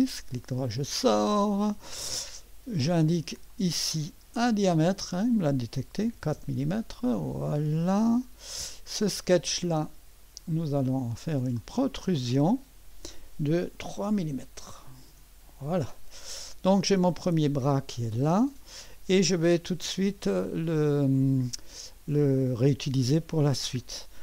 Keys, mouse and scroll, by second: 1.4 click, 1.8-2.5 drag, 3.5-4.6 drag, 5.8-6.5 typing, 8.2 click, 9.6-11.1 drag, 9.7 typing, 11.6 click, 14.7-15.1 typing, 18.0 scroll down 1, 18.2 right click, 20.4-22.1 drag, 20.5-21.3 typing, 23.7-24.2 typing.